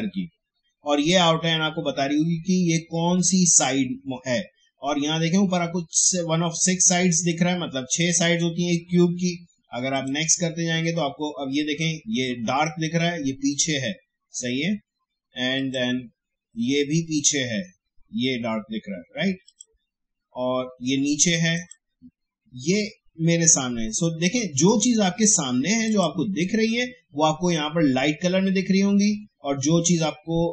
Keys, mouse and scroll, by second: 9.9 click, 15.5 click, 19.4 click, 25.8 click.